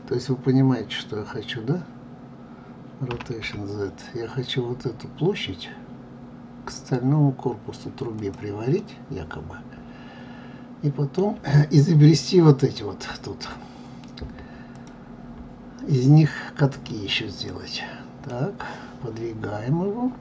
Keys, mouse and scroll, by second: 3.1 r, 8.8-11.8 middle drag, 12.6 click, 14.7 click, 17.4-20.2 middle drag.